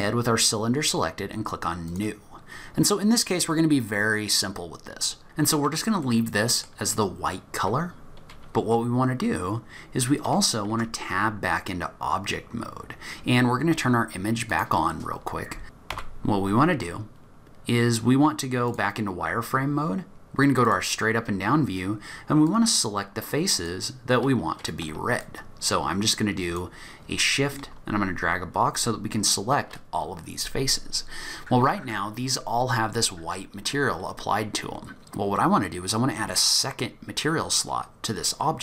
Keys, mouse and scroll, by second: 1.9 click, 4.2-4.8 scroll down 1, 4.8-5.5 scroll up 2, 5.2 middle click, 6.1 middle click, 7.1-7.8 scroll up 1, 7.8-9.0 scroll down 1, 10.0 scroll up 1, 10.7 Tab, 11.8-12.8 scroll up 3, 12.8 scroll down 1, 12.9 scroll down 2, 14.5 click, 15.9 z, 20.6 click, 21.3 scroll up 1.